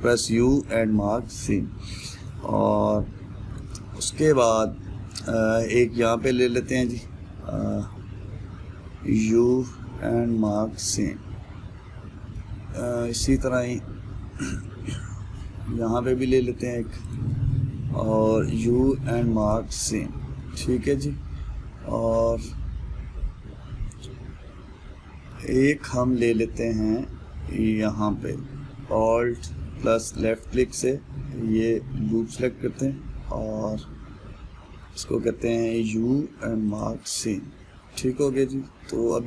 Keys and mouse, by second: 1.3 u, 2.1-8.4 middle drag, 8.4 alt+click, 11.2 u, 11.7-17.7 middle drag, 17.7 alt+click, 20.1 u, 21.0-24.0 middle drag, 26.6-30.8 middle drag, 30.8 alt+click, 31.4-34.4 middle drag, 38.0-39.2 middle drag.